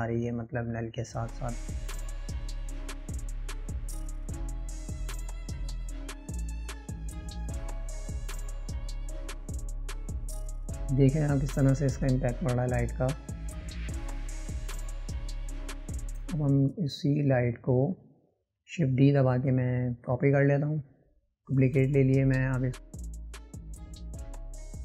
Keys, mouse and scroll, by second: 6.2 ctrl+v, 7.1 ctrl+z, 7.8 click, 8.8 shift+d, 13.2-16.4 drag, 20.2-21.2 drag.